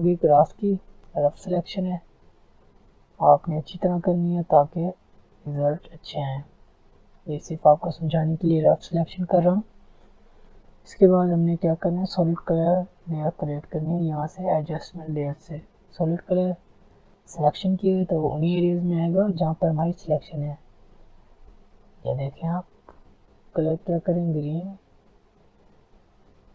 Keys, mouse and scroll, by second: 0.6 alt+scroll up 1, 1.1 alt+scroll down 1, 2.0-6.1 alt+drag, 6.1 alt+scroll down 1, 6.5 alt+scroll up 1, 7.1-10.1 alt+drag, 10.1 alt+scroll down 1, 10.4 alt+scroll up 1, 11.5 alt+scroll down 1, 12.1 alt+scroll up 1, 12.7 alt+scroll down 1, 13.4 alt+scroll up 1, 15.1-22.4 drag, 24.3 click.